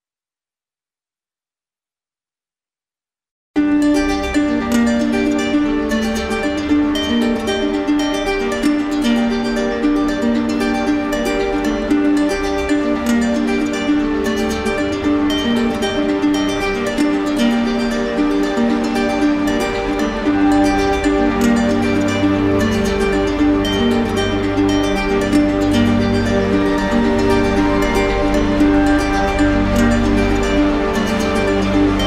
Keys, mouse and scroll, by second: 0.4 right click, 0.9 alt+right click, 1.6 alt+right click, 2.0 click, 2.9 right click, 3.5 ctrl+d, 3.9 ctrl+d, 4.7 right click, 7.0 right click, 8.3 shift+right click, 9.2 alt+right click, 10.9 right click, 11.3 alt+right click, 12.2 right click, 13.9 alt+right click, 14.2 alt+right click, 15.4 alt+right click, 18.2 click, 20.2 click, 22.1 click, 22.5 alt+click, 23.3 w, 25.3 alt+click, 26.4 alt+click, 29.7 click, 30.8 click, 31.3 alt+click, 31.9 alt+click.